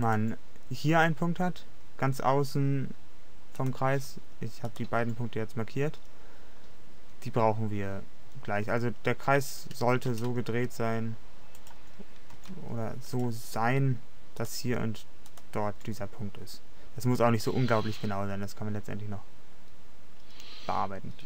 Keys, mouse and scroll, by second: 0.5 r, 3.7-7.4 drag, 9.4 a, 9.6 a, 10.6 r, 12.4 g, 14.0-17.0 drag, 17.0 middle click.